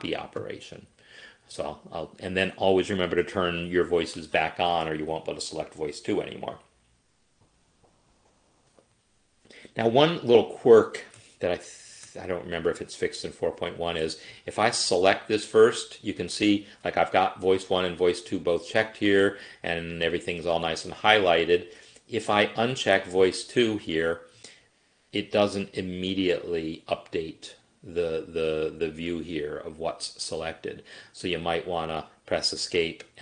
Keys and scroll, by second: 32.3 Escape.